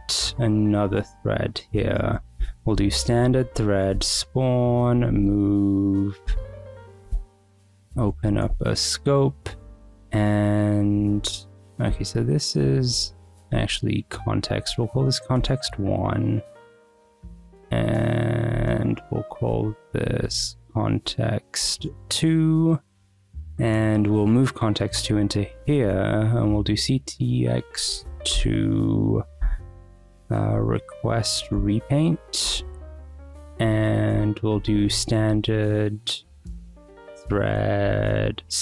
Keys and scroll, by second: 1.5 shift+a, 1.7 Return, 2.7-6.8 typing, 7.6 Return, 7.7 Escape, 7.8 j, 8.2 ;, 8.5 Escape, 10.1 k, 11.6 w, 11.9 ,, 13.0 BackSpace, 13.4 c, 13.7 t, 14.6 1, 15.4 Return, 16.3 Escape, 16.6-20.0 typing, 20.5 Left, 20.6 Right, 21.3 BackSpace, 22.0 Escape, 23.0 j, 25.1 k, 25.6 Return, 25.8 c, 26.1 x, 27.9 Down, 28.3 Return, 29.4 ., 30.5 r, 30.8 q, 31.3 Down, 31.5 Return, 32.4 ;, 32.7 Escape, 33.6-38.6 typing, 34.1 Return.